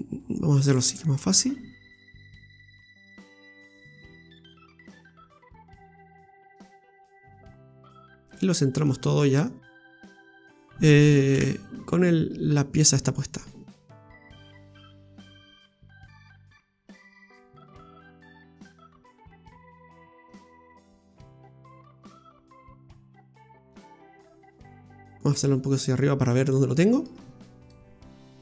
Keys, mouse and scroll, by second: 0.7 click, 1.8 right click, 2.9 right click, 3.3 alt+shift+right click, 3.6 right click, 4.0 right click, 4.8 alt+shift+right click, 5.4 right click, 5.7 alt+shift+right click, 6.0 right click, 6.4 right click, 6.9 alt+shift+right click, 7.6 shift+right click, 7.9 shift+right click, 9.0 shift+right click, 9.2-9.7 scroll down 2, 9.5 middle click, 11.3 KP_Divide, 12.0 scroll down 1, 12.1-12.8 scroll up 5, 12.8-13.4 scroll down 2, 13.2 middle click, 16.4 g, 18.3 ctrl+z, 19.4 click, 21.4 middle click, 23.0 click, 24.3 middle click, 25.3 click, 26.7 middle click, 27.7 click.